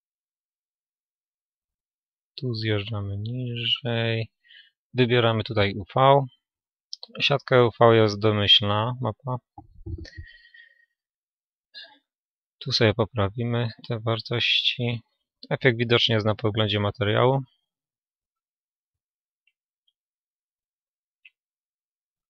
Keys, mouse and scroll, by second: 17.7-19.7 middle drag, 22.0-22.2 middle drag.